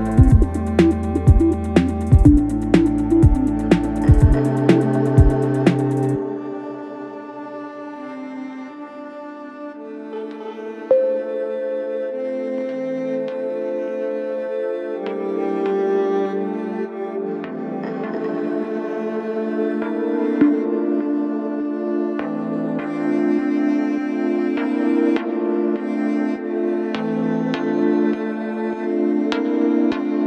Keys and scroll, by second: 0.6 Delete, 2.0 F1, 4.6 f, 5.9 shift+f, 18.7 4, 20.3 3, 22.2 4.